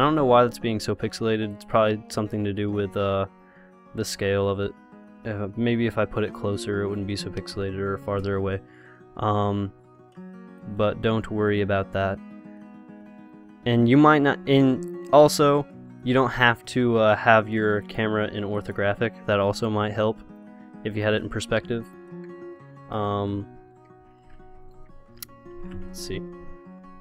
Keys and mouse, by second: 1.7-3.1 drag, 3.1-7.7 middle drag, 7.7 click, 7.7 KP_0, 10.9-12.7 drag, 16.3 middle click, 18.1-23.8 drag, 22.6 KP_0, 24.2 KP_0.